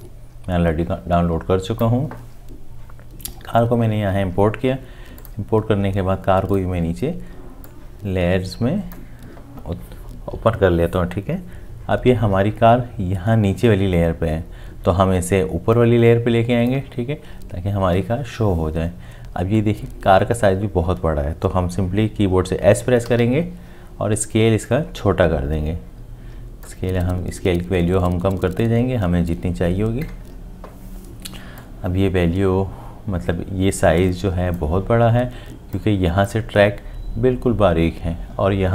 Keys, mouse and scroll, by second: 23.1 s.